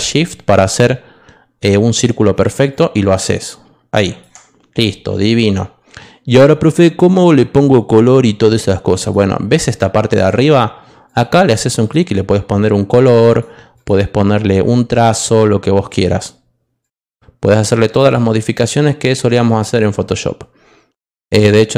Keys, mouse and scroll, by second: 2.7-4.2 shift+drag, 11.0 click, 11.8 click, 13.3 click, 13.7 click, 18.9 click, 21.4 click.